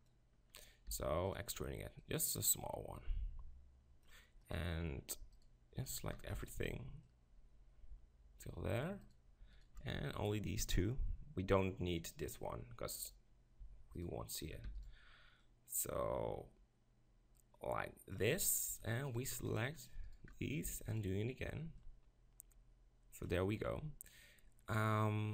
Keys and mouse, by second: 0.9 e, 1.4-4.0 drag, 4.4 click, 6.3 shift+e, 8.3 shift+click, 14.7 shift+e, 18.5-20.2 right drag, 20.7 e.